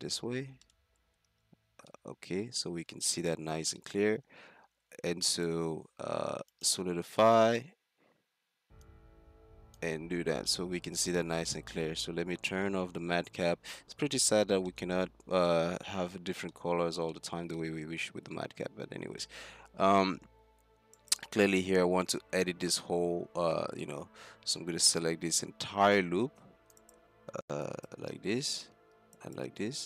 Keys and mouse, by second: 0.1 middle click, 1.3 z, 3.9 click, 4.8 Tab, 5.2-6.5 drag, 5.2 z, 8.9-11.3 drag, 10.0 z, 17.1 middle click, 17.3-17.6 middle drag, 21.0 right click, 21.6 Tab, 22.6 a, 24.3 c, 26.9-29.8 drag, 29.8 middle click.